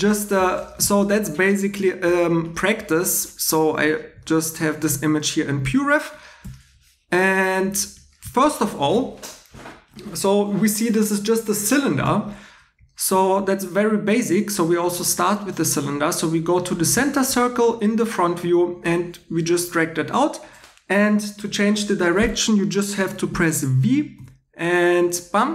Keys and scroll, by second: 24.1 v.